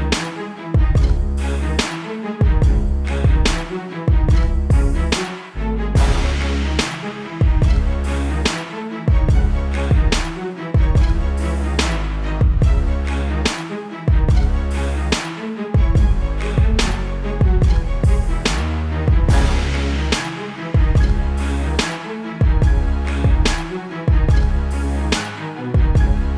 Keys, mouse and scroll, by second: 1.0 alt+shift+click, 2.4 click, 3.6 Return, 5.8 click, 7.8 ctrl+t, 9.0 Escape, 9.9 ctrl+l, 12.4 click, 13.6 Return, 14.4 ctrl+t, 14.8 click, 17.0 Return, 18.0-18.8 scroll up 1, 18.8 click, 26.2 shift+Num_Lock.